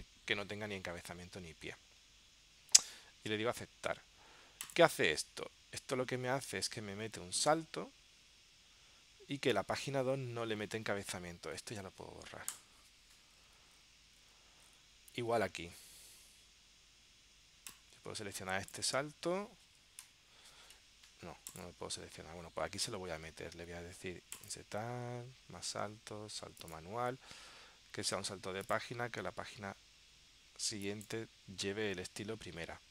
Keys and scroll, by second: 20.1 shift+Right.